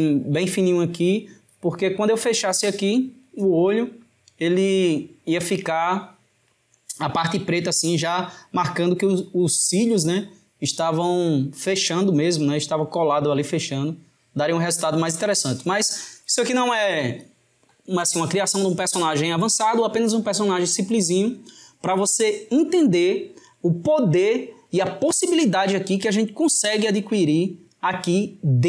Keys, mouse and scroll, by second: 2.6-5.6 drag.